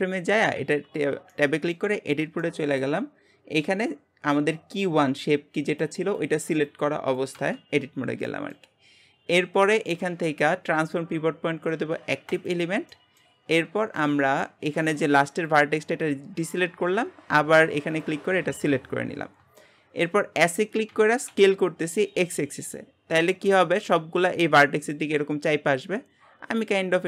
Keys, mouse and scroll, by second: 0.6 Tab, 1.4-9.1 shift+middle drag, 9.1 scroll up 1, 12.5 click, 12.9-14.4 shift+middle drag, 14.4-15.6 drag, 16.9-18.0 scroll up 1, 18.0 shift+click, 19.2-19.6 scroll down 1, 19.6-20.9 shift+middle drag, 20.9 s.